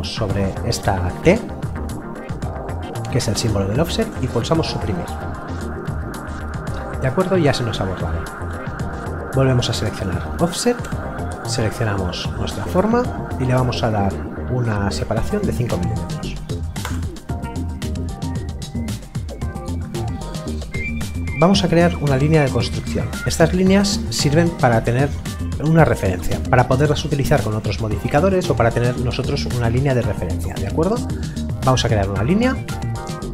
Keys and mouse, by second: 0.0 click, 4.6 Delete, 9.4 click, 15.4 KP_5, 16.8 Return, 16.8 KP_Enter, 22.3 click, 31.7 click.